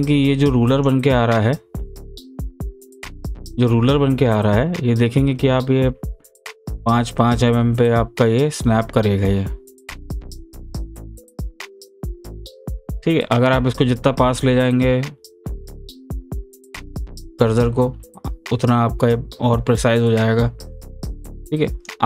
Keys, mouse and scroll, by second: 3.2-13.3 drag.